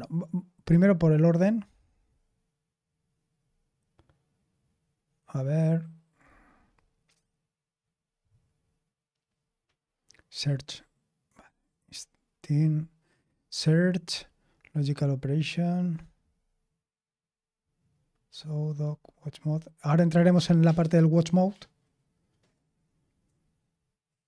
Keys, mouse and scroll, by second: 3.3-4.9 scroll up 1, 4.9-6.1 scroll up 1, 6.1-7.1 scroll up 1, 7.1-8.0 scroll up 1, 8.0-8.5 scroll up 1, 8.5-9.3 scroll up 1, 9.3-10.5 scroll up 1, 10.5-11.3 scroll up 1, 11.3-12.1 scroll up 1, 12.1-13.7 scroll up 1, 13.7-15.8 scroll up 1, 15.8-17.3 scroll up 1, 17.3-17.8 scroll up 1, 17.8-20.1 scroll up 1, 20.1-24.2 scroll up 1.